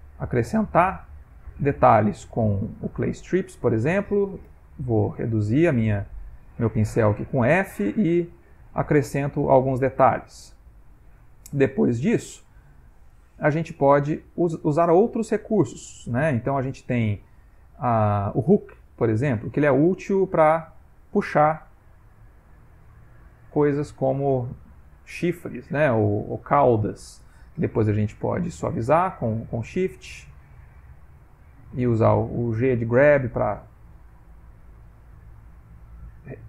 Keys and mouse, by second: 4.5 f, 7.0 click, 7.7 click, 8.0 click, 8.3 click, 8.6 click, 8.9 click, 9.3 click, 9.7 click, 10.1 click, 10.4 click, 11.2 click, 11.5 click, 11.9 click, 12.5 click, 18.9 click, 19.8 click, 21.7 click, 23.0 click, 24.3 click, 25.4 click, 28.1 shift+click, 28.4 shift+click, 29.0 shift+click, 30.4 shift+click, 31.0 shift+click, 32.0 g, 32.1 click, 33.3 click, 33.9 click, 34.3 click, 34.7 click, 35.3 click, 35.7 click, 36.1 click.